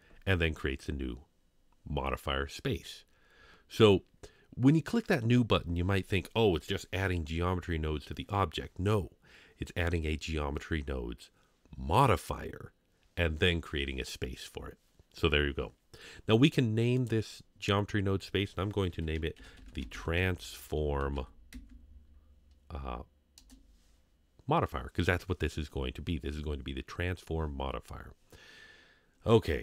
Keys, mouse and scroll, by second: 17.0-23.4 drag.